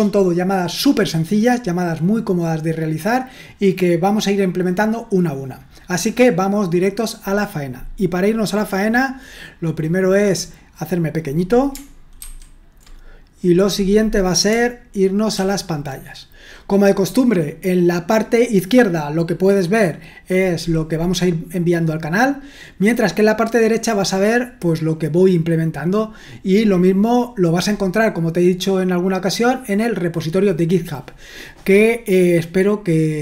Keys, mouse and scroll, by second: 12.2 ctrl+1, 15.3 super+1.